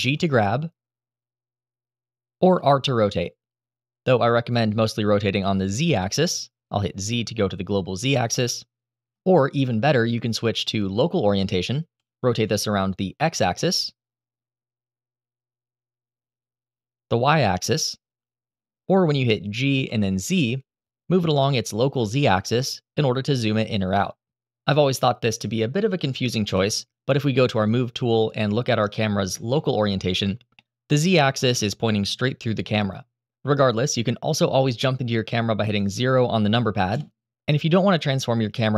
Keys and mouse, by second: 1.9 click, 2.1 r, 4.8 z, 9.1 Escape, 10.2-11.4 drag, 11.9 r, 11.9 x, 16.0 y, 18.7 Escape, 19.4 g, 20.0 z, 26.2 KP_0, 29.3-29.6 shift+middle drag, 30.3-30.8 middle drag, 30.9-31.3 shift+middle drag, 36.6 KP_0.